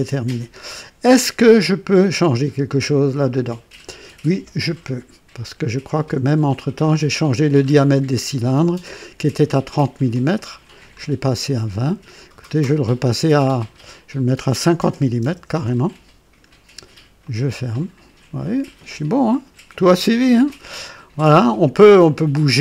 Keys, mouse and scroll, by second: 1.6-2.2 right drag, 2.3-3.3 drag, 5.6 click, 6.5 click, 7.6-8.1 scroll up 2, 8.8 right click, 10.2-12.5 drag, 13.5 click, 14.8 KP_5, 15.1 KP_0, 15.4 Return, 17.1 click, 18.1-18.9 typing, 18.4-22.2 drag, 21.8 typing.